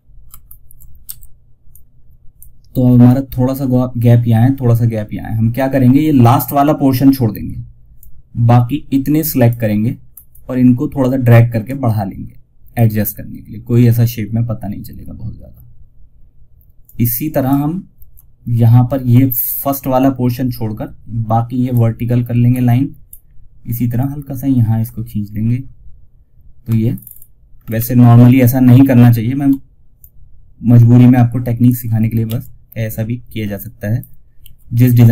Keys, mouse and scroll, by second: 0.3 F2, 1.0-9.4 drag, 9.4 scroll up 1, 13.7 scroll down 1, 16.1 typing, 16.1-21.8 drag, 21.8-22.3 scroll up 1, 23.3 click, 24.5 scroll down 1, 26.2 alt+scroll up 1, 29.3-31.5 shift+drag, 31.5 1, 32.9 click, 33.7 ctrl+z, 34.5 scroll up 1.